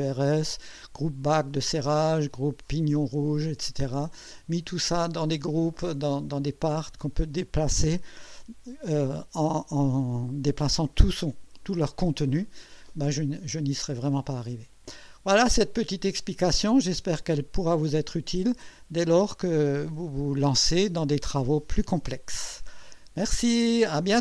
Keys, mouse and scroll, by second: 4.4 click, 6.7 click, 13.3-14.6 drag, 14.8 scroll up 1, 15.5-16.4 right drag, 16.5 click, 17.5-20.4 drag.